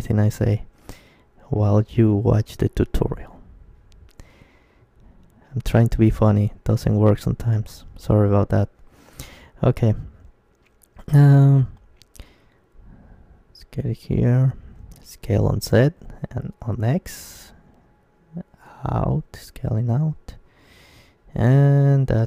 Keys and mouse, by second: 0.7 middle click, 0.7 KP_1, 2.2-3.9 middle drag, 3.8 e, 4.1-6.0 drag, 4.4 s, 9.0-10.9 right drag, 10.1 s, 12.3-14.2 drag, 14.2 s, 19.9-21.8 drag, 20.2 Tab.